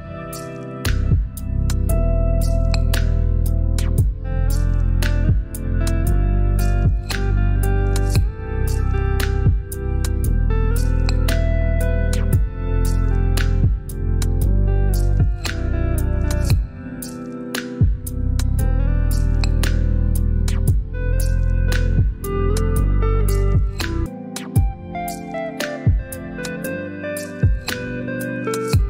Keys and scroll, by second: 1.7 i, 4.3 typing, 4.9 ctrl+BackSpace, 13.8 ctrl+j, 14.4 shift+Down, 25.3 ctrl+z, 26.4 ctrl+z.